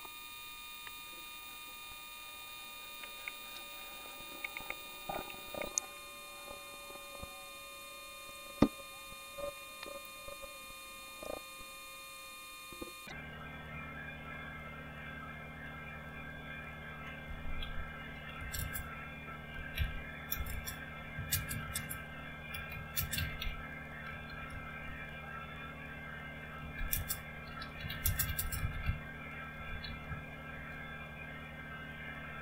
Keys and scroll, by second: 17.7 typing, 19.5-25.7 typing, 26.8-30.5 typing.